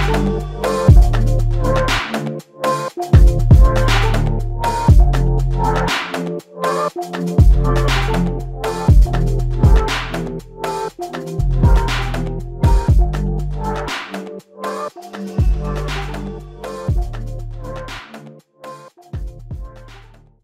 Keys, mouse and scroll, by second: 2.4-3.2 typing, 6.9 typing, 13.8 typing, 15.9 double click, 16.5 alt+click, 19.9 Insert.